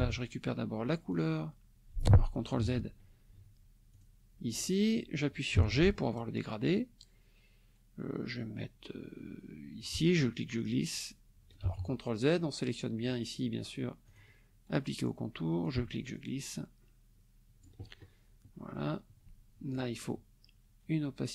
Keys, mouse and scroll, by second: 1.1 click, 2.6 ctrl+z, 3.9 shift+click, 5.5 g, 5.8 click, 9.8-11.7 ctrl+drag, 11.6 ctrl+z, 14.1 click, 15.6-17.8 ctrl+drag.